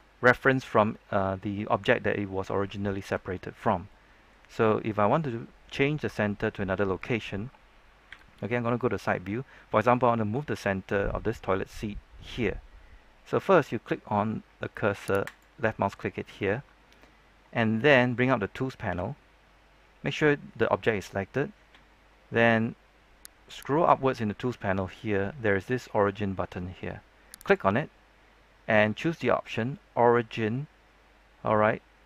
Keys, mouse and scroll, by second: 2.3-3.1 scroll down 1, 3.2-4.9 shift+middle drag, 8.0 KP_3, 15.2 click, 18.8 t, 21.8-22.2 scroll up 1, 22.2-23.4 scroll down 1, 23.4-32.0 drag.